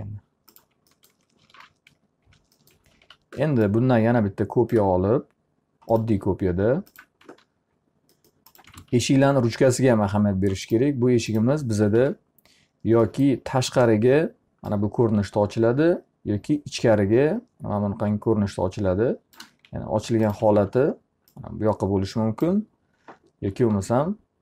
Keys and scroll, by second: 1.7 t, 2.5 F3, 3.6 w, 7.4 z, 9.3 alt+a, 12.5 e, 20.7 w, 24.1 e.